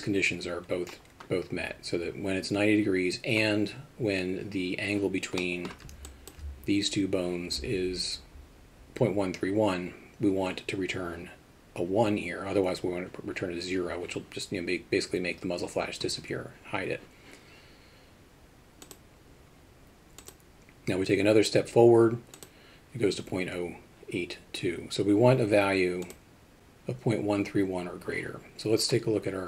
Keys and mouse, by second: 5.4 middle drag, 6.1 alt+shift+middle drag, 22.4 click.